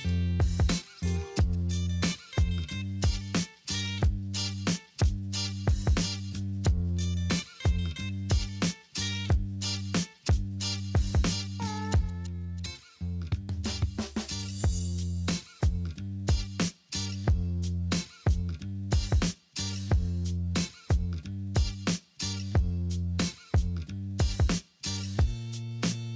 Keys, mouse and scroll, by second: 7.7 double click, 7.7 double click, 8.6 5, 8.8 Return, 8.8 5, 20.1 double click, 21.2 2, 21.4 Return, 22.5 middle click, 22.9 F4.